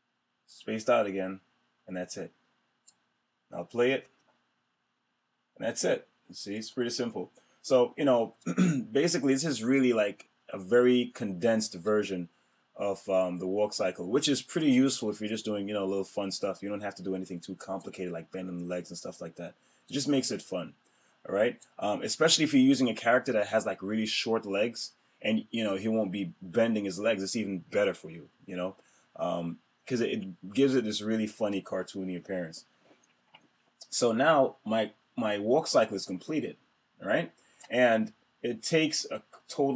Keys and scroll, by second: 3.8 Return, 6.4 Return.